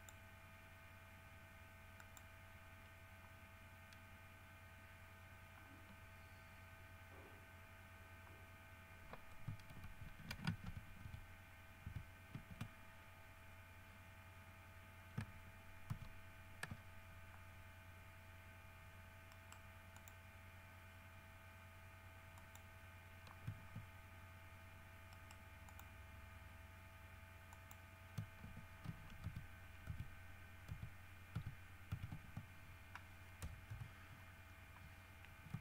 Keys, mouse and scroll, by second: 0.2 click, 2.2 click, 6.1-7.2 scroll down 3, 11.3 ctrl+alt+shift+q, 12.1 ctrl+alt+q, 16.1 ctrl+z, 19.5 right click, 20.2 click, 22.6 click, 25.4 right click, 25.9 click, 27.8 click, 29.5 ctrl+alt+q, 30.9 ctrl+alt+q, 33.6 KP_3.